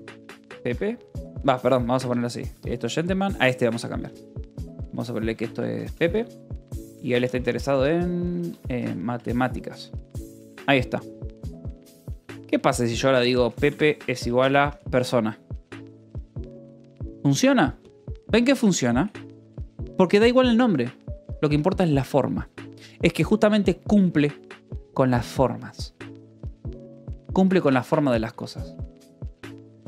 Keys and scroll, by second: 0.0-11.9 typing, 5.9 Escape, 12.0 Return, 13.0-16.2 typing, 16.4 Escape, 18.2 shift+v, 19.7 Escape, 27.0 k, 27.9 j, 28.8 j, 29.4 Escape.